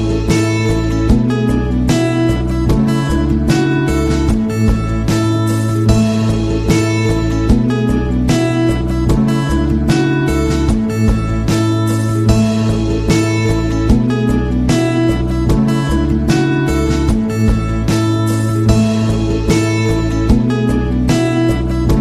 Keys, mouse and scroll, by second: 2.8 click, 3.9-7.6 drag, 9.0 click, 10.8 click, 11.9 click, 13.1 click, 13.8 click, 14.7 click, 17.2 click, 19.4 click, 20.8 click.